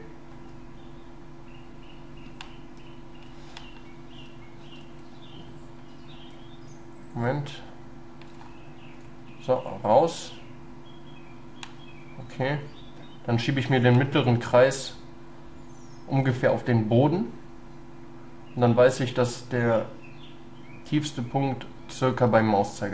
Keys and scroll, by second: 3.7 ctrl+z, 4.9 ctrl+y.